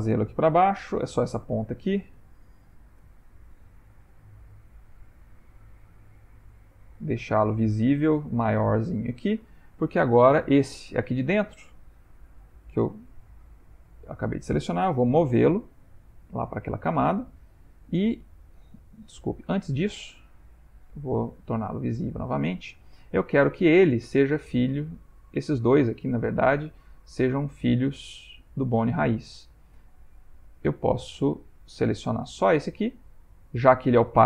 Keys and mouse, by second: 3.0 g, 7.2-7.9 ctrl+middle click, 8.1-8.7 shift+middle click, 8.6 shift+middle click, 8.8 ctrl+middle click, 9.2 ctrl+middle click, 10.2 click, 12.1 Tab, 13.0 middle click, 13.1 middle click, 15.2 m, 17.1 ctrl+middle click, 17.7 middle click, 21.2 click, 22.1 shift+click, 22.7 ctrl+middle click, 25.3 click, 30.5 middle click, 31.8 middle click, 31.9 middle click, 32.3 Tab.